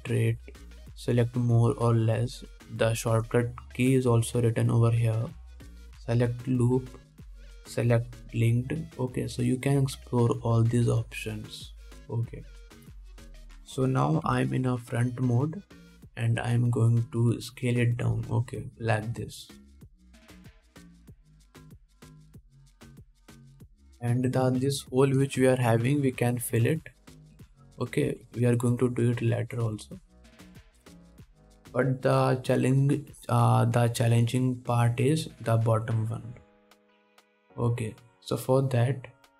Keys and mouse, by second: 15.5 KP_1, 19.3 s, 21.6-30.2 drag, 22.0 s, 25.9 alt+a, 27.6 2, 28.6 3, 29.3 1, 30.2-32.3 middle drag, 31.7 KP_1, 37.7 alt+a, 38.3 2, 38.9 2.